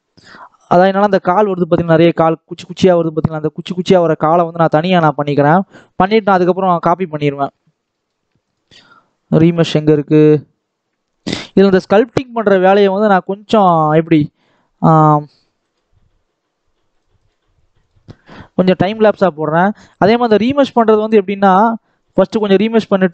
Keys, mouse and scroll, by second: 0.1-1.3 drag, 4.7-7.5 shift+middle drag, 7.5 scroll down 2, 7.8 shift+middle click, 11.2 click, 12.7 scroll up 2, 13.2-14.4 shift+middle drag, 14.4 click, 15.5-20.7 drag, 21.9-23.1 drag.